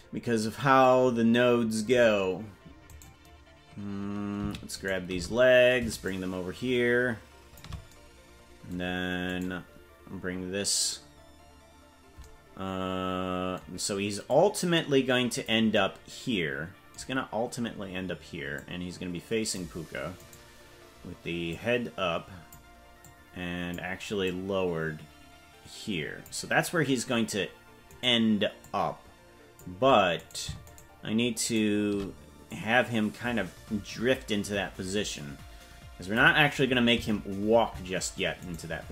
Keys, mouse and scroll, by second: 3.0 right click, 4.8 shift+right click, 6.0-7.6 shift+drag, 9.4 right click, 14.2-15.5 drag, 18.5-19.5 drag, 20.3 right click, 21.5-22.5 drag, 23.0 click, 24.2-26.3 drag, 27.9 right click, 28.6-29.6 drag, 30.7 shift+right click, 31.9 right click, 32.4-36.2 drag, 36.9 KP_0, 38.5 right click.